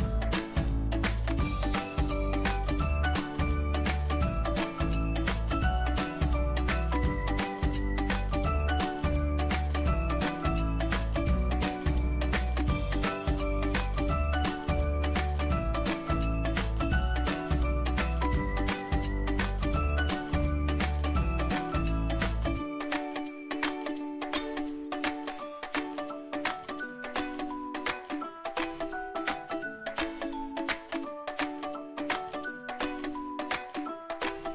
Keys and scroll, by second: 1.4 alt+Right.